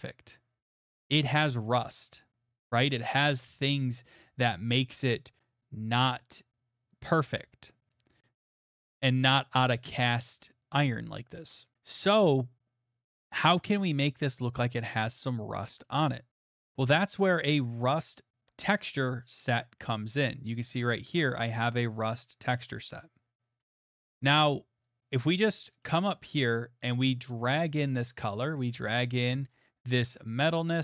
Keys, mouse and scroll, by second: 0.3 click, 3.9 click, 7.4 click, 11.2 middle click, 15.8 middle click, 16.7 click, 18.8 click, 18.9 click, 20.5 click, 20.9 click, 23.7 click, 24.2 click, 25.8 click, 26.4 click, 29.5 right click.